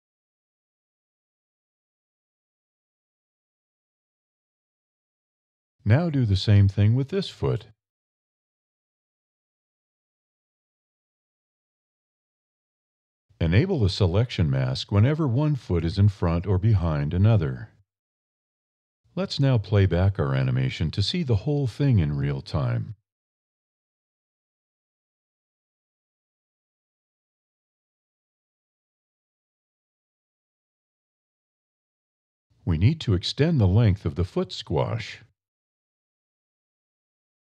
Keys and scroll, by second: 0.5 e, 2.5 alt+e, 3.4 e, 7.7 alt+e, 12.4 alt+e, 14.4 e, 15.2 a.